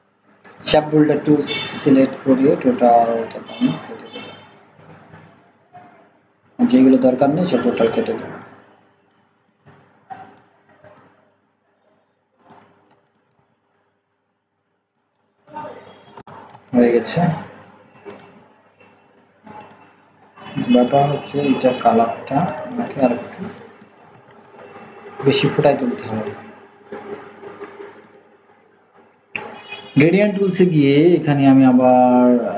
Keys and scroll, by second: 24.3 ctrl+z.